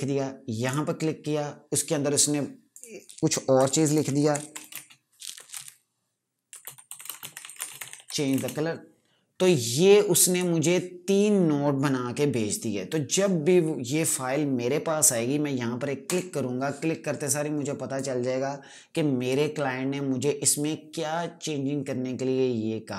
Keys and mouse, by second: 0.5 click, 3.2-8.6 typing, 10.2 click, 16.0 click.